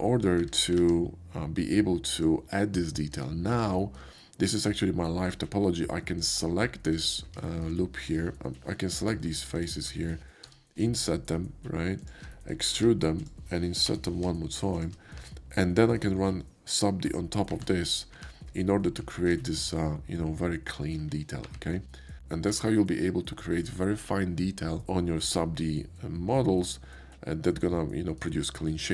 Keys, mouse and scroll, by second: 0.5 Tab, 2.1 click, 2.8 ctrl+right click, 3.1 Tab, 3.7 shift+Tab, 3.8 middle click, 4.2 middle click, 6.1 shift+middle click, 6.9 middle click, 7.5 shift+middle click, 9.0 shift+middle click, 9.5 ctrl+middle click, 12.0 shift+middle click, 12.8 e, 15.1 Tab, 15.6-17.3 middle drag, 17.5 ctrl+1, 18.1 ctrl+2, 19.1 shift+middle click, 19.5 shift+middle click, 21.4 ctrl+3, 22.0 ctrl+middle click, 22.6-23.6 shift+middle drag, 26.6 shift+middle click, 27.4 shift+middle click.